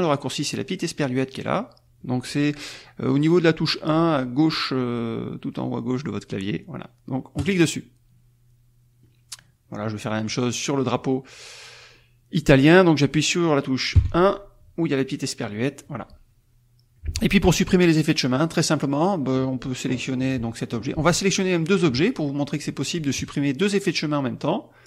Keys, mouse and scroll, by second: 7.5 click, 9.6 middle click, 9.6-10.2 scroll up 1, 10.8 click, 17.9-18.9 drag, 21.2 shift+click, 23.1 click.